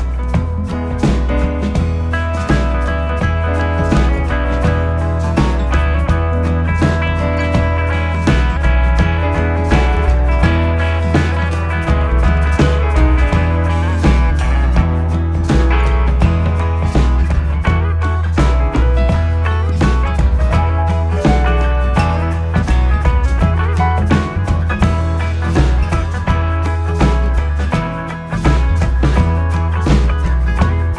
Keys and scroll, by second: 0.0 4, 15.2 ctrl+z, 26.3 ctrl+F1, 27.9 ,.